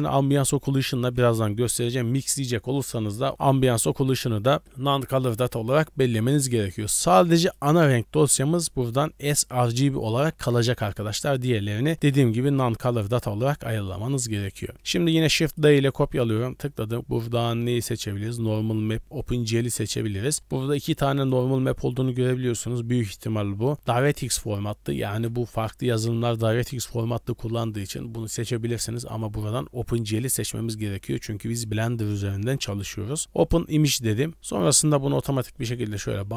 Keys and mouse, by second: 7.4 click, 14.0 click, 14.6 click, 14.7 middle click, 15.1 shift+d, 34.3 middle click, 35.4-36.0 drag.